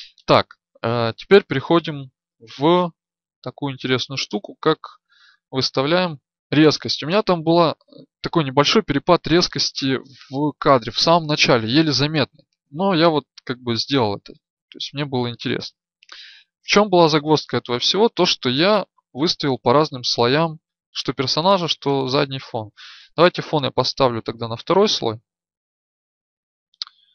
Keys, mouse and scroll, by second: 0.0 Escape.